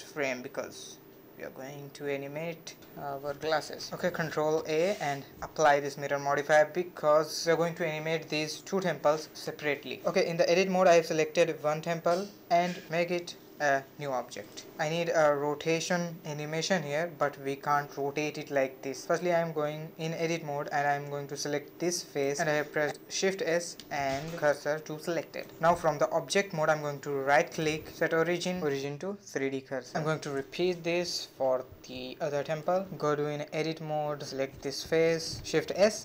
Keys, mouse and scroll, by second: 0.0-0.7 drag, 0.7-1.1 middle drag, 1.1-1.5 scroll up 2, 1.5-2.2 middle drag, 2.2 click, 2.6 middle click, 4.7 ctrl+a, 5.2 middle click, 5.3 Tab, 6.1 a, 7.0 a, 7.2 a, 8.3 l, 9.0 l, 10.8 p, 11.9 Tab, 12.3 click, 13.0 scroll up 1, 13.2-14.6 middle drag, 14.6 r, 17.0-18.0 middle drag, 18.0-18.6 scroll up 1, 18.6 Tab, 18.8-19.3 scroll up 3, 19.3-20.7 middle drag, 20.7 3, 20.8 click, 21.8 shift+s, 25.2 Tab, 29.9 click, 30.6-32.1 shift+middle drag, 32.1-32.5 scroll up 2, 32.5-33.5 middle drag, 33.5 Tab, 33.9 click, 34.9 shift+s.